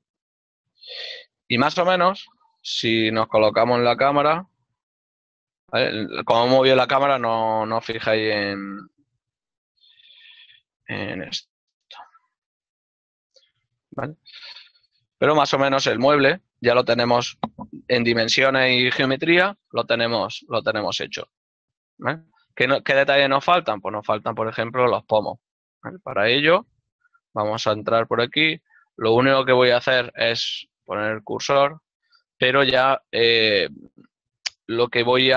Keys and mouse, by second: 0.3 shift+middle click, 6.0 KP_0, 8.4 ctrl+middle click, 9.8 n, 10.9 middle click, 13.1 click, 13.3 n, 13.4 shift+middle click, 15.0 Tab, 16.3 click, 16.4 shift+middle click, 20.7 shift+middle click, 26.0 Tab, 27.2 right click, 27.4 Tab, 28.2 click, 28.6 right click, 30.1 shift+s, 31.1 click.